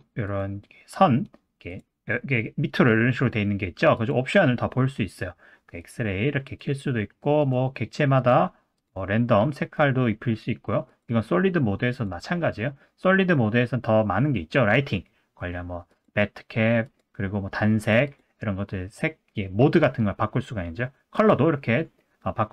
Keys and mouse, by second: 0.3-1.8 drag, 4.0-9.4 drag, 9.5 middle click, 10.9 click, 11.9-22.5 drag.